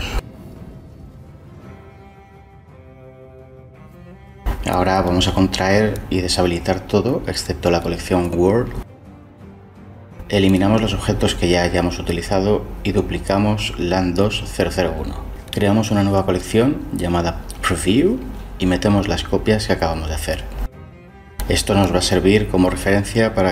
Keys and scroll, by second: 13.8 Delete, 20.3 shift+d, 21.2 ⟲.